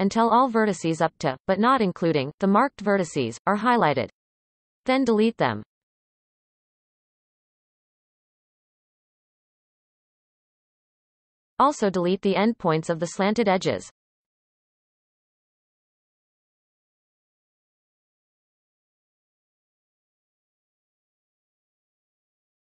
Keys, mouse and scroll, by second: 1.3 ctrl+KP_Add, 1.6 ctrl+KP_Add, 1.9 ctrl+KP_Add, 2.2 ctrl+KP_Add, 3.3 ctrl+KP_Add, 4.4 x, 5.8-6.2 shift+middle drag, 6.2-6.7 scroll up 1, 6.7-7.6 shift+middle drag, 7.6 click, 8.3-8.8 ctrl+KP_Add, 10.1 x, 10.7-11.6 scroll down 9, 11.6-13.3 shift+middle drag, 13.3 click, 13.6 x, 14.4-14.8 scroll down 1, 14.8-16.1 shift+middle drag, 16.1 click, 16.5 x, 17.5-18.0 shift+middle drag, 18.0-18.8 scroll up 3, 18.8-19.2 shift+middle drag, 19.2-20.0 scroll up 1, 20.0 click, 20.7 ctrl+KP_Add, 21.2-21.6 scroll up 3, 21.4 shift+middle click, 21.6 shift+middle click, 22.1-22.6 ctrl+KP_Add.